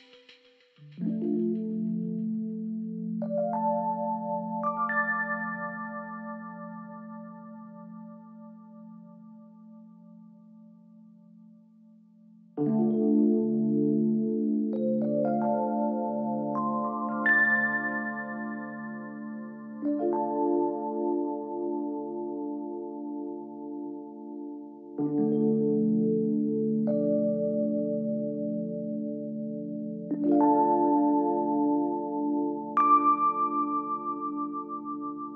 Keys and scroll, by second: 2.9 ctrl+d, 29.8 ctrl+t.